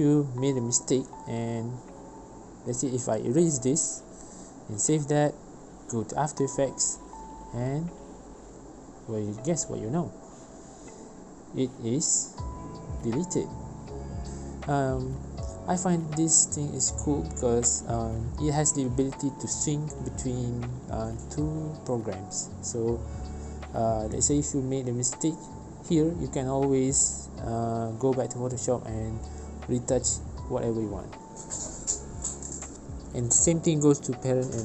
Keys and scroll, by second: 2.6 ctrl+z, 5.5 ctrl+s, 15.6 ctrl+z, 16.9 ctrl+s, 32.9 v.